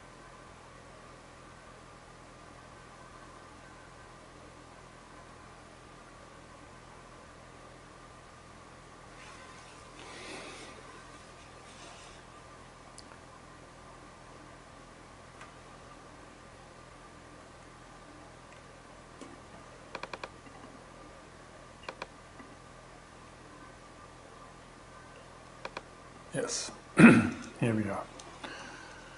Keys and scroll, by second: 16.8 super+Tab.